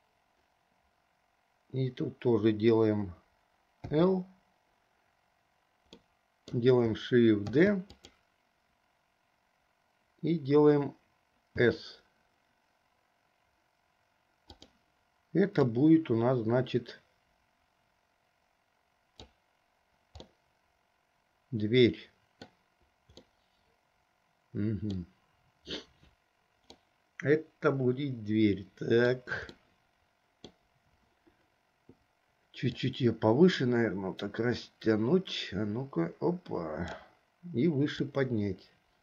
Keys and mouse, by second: 4.1 click, 6.1 click, 7.6 shift+d, 11.7 s, 15.9-19.6 drag, 20.5-22.8 middle drag, 23.4-25.2 middle drag, 27.0-29.4 middle drag, 29.7-30.7 middle drag, 32.9 click, 33.4-37.3 drag, 38.2-39.0 drag.